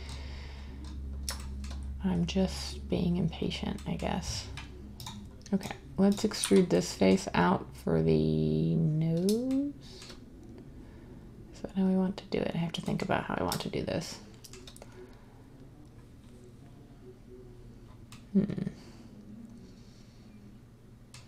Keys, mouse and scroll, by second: 6.4 z.